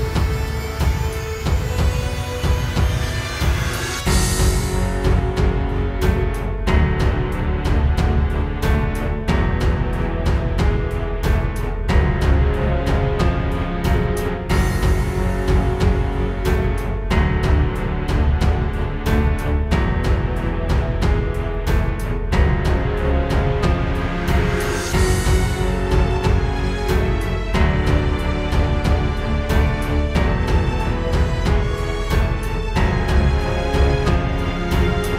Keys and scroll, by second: 0.1 space, 1.0 alt+super+space, 4.0 space, 4.5 super+space, 5.0 space, 5.7 alt+super+space, 17.8 space, 19.4 space, 20.3 space, 23.2 space, 23.4 space, 24.3 space, 28.7 space, 29.2 space.